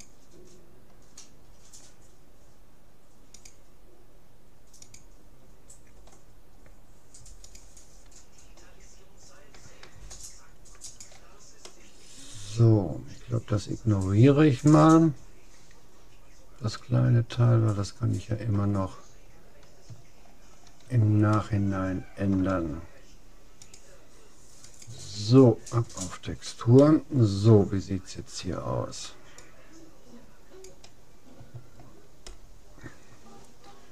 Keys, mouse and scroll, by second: 10.9-12.5 drag, 11.7-13.3 middle drag, 19.1-23.1 middle drag, 23.7-25.3 drag, 26.9-28.5 middle drag, 29.5-31.1 drag, 31.5-33.9 middle drag.